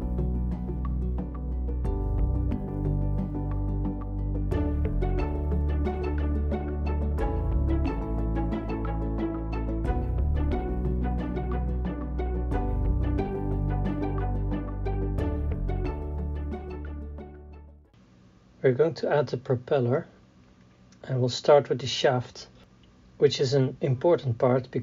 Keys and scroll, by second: 0.5 Tab, 1.1 Tab, 1.5 KP_3, 1.6 KP_1, 1.7 KP_3, 3.5-5.7 typing, 6.0 Tab, 7.2 Tab, 8.3-9.9 typing, 8.6 Return, 10.3 Tab, 11.0 Tab, 12.0 KP_3, 14.8-17.8 typing, 16.5 Tab, 16.6 Tab, 17.9 Return, 18.9 s, 20.8 KP_3, 22.6 s.